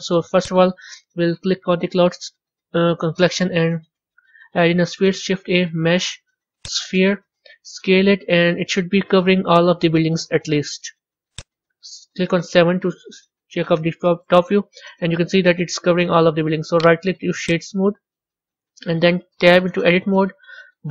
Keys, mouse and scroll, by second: 0.3 click, 2.1-5.0 middle drag, 5.0 shift+a, 7.7 s, 12.4 KP_7, 13.2-14.2 scroll down 2, 14.2-16.6 middle drag, 16.6-18.1 right drag, 18.1-19.7 middle drag, 19.7 b.